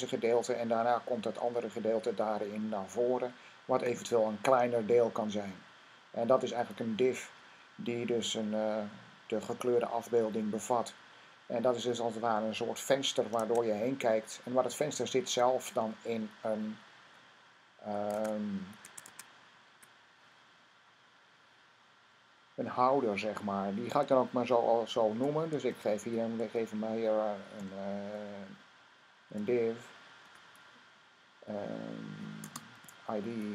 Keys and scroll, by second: 13.2 Tab, 18.0 Tab, 18.7 super+Tab, 18.9 super+Tab, 25.5 typing, 27.4 typing, 29.1 typing, 32.5 typing.